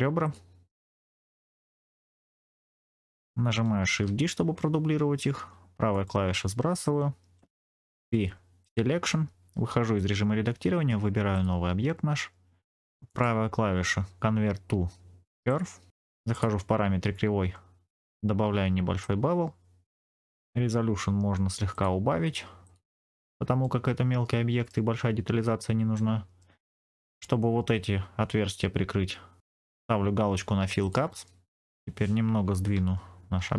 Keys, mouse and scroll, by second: 0.1 shift+click, 0.9 shift+click, 1.1 middle click, 2.0 shift+click, 2.4 shift+click, 3.8 shift+d, 5.8 right click, 7.9 p, 9.8 Tab, 11.2 click, 13.0-15.9 right drag, 16.2 click, 18.9-20.2 shift+drag, 21.6 click, 22.5 click, 23.5-24.7 middle drag, 25.8 middle click, 26.7-27.2 scroll up 2, 30.7 click, 31.5 KP_1, 33.3 g.